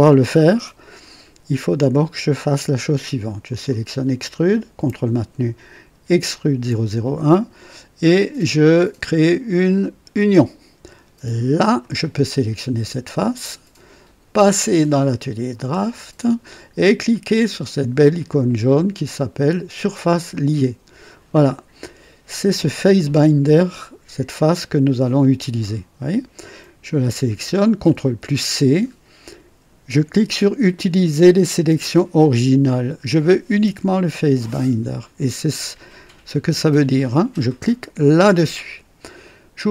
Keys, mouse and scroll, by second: 3.4 click, 6.3 ctrl+click, 10.1 click, 11.5 click, 14.4 click, 15.5 click, 20.3 click, 27.9 c, 37.9 click.